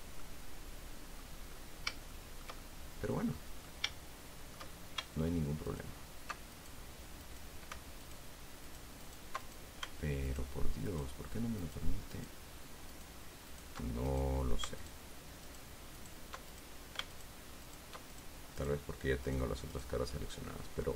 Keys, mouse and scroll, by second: 0.5-1.7 drag, 1.8 scroll down 2, 2.4-3.9 shift+middle drag, 4.3 shift+middle click, 6.0 alt+shift+right click, 6.9 alt+shift+right click, 7.6 shift+right click, 8.4 alt+shift+right click, 9.0 alt+shift+right click, 9.8 alt+shift+right click, 10.6 alt+shift+right click, 11.2 alt+shift+right click, 11.9 alt+shift+right click, 12.5 alt+shift+right click, 13.2 alt+shift+right click, 13.8 alt+shift+right click, 14.4 alt+shift+right click, 15.1 alt+shift+right click, 15.8 alt+shift+right click, 16.3 alt+shift+right click, 16.8 alt+shift+right click, 17.5 alt+shift+right click, 18.0 alt+shift+right click, 18.4 alt+shift+right click, 18.9 alt+shift+right click, 19.6 shift+right click, 20.1 shift+right click, 20.5 shift+middle click.